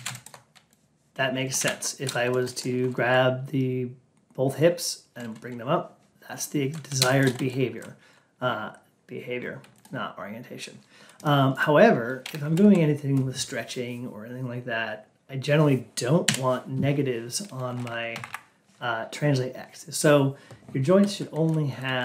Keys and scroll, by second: 12.3 Down, 17.6 Down, 18.0 Up.